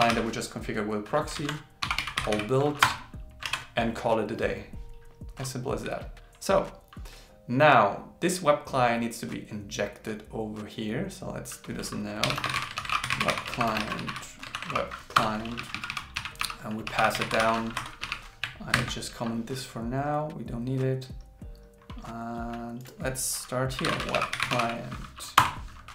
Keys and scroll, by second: 1.4 super+Right, 3.5 super+s, 12.8 shift+c, 13.6 shift+., 13.8 shift+w, 14.6 shift+c, 18.8 super+7, 24.1 shift+c, 24.4 shift+l.